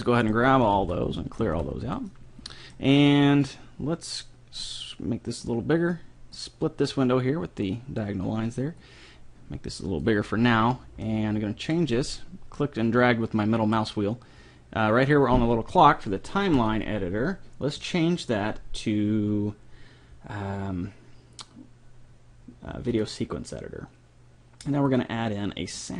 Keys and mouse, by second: 0.4-2.1 right drag, 0.6 a, 0.8 a, 1.4 alt+g, 1.8 a, 2.1 middle click, 4.6-6.2 drag, 8.8-10.6 drag, 11.0 middle click, 13.5-15.2 drag, 16.6-18.4 drag, 24.9 click.